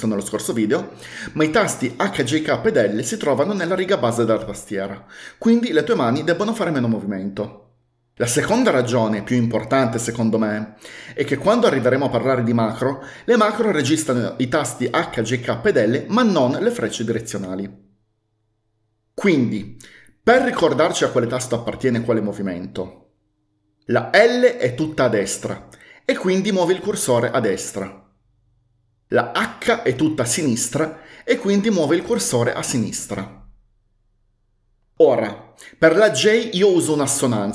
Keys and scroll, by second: 24.3-26.0 typing, 29.8-31.4 typing.